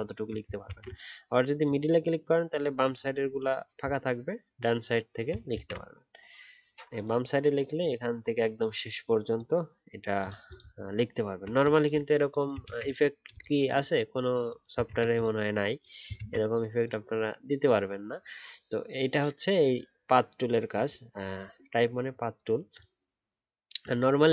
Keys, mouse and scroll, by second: 0.0 alt+scroll down 1, 0.6-3.6 alt+scroll, 5.5 ctrl+z, 10.7 alt+scroll down 1, 11.2 alt+scroll down 1, 11.2-12.6 alt+scroll up 1, 12.6-14.8 alt+scroll, 14.8 ctrl+z, 16.1 ctrl+z.